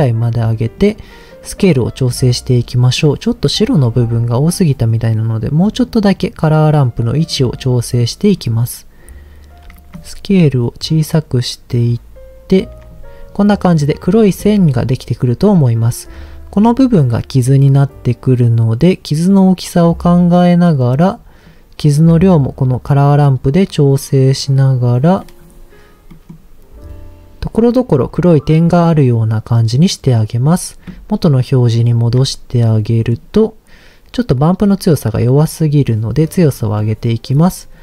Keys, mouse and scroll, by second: 0.8-2.1 drag, 3.0 middle click, 4.3 click, 4.9 click, 5.8-7.3 drag, 7.6 click, 8.3-9.4 scroll up 2, 9.9-12.2 shift+drag, 12.4 shift+click, 14.2 middle click, 15.4-16.5 scroll down 2, 16.6-17.6 scroll up 3, 17.6-19.9 drag, 20.6 click, 21.4-22.8 drag, 23.4 click, 24.2 click, 25.2 middle click, 25.4-26.1 scroll down 1, 26.1 middle click, 26.8-27.4 scroll down 2, 31.7 ctrl+shift+click, 32.8 middle click, 35.0 click, 36.6 middle click, 36.8-37.8 scroll up 5.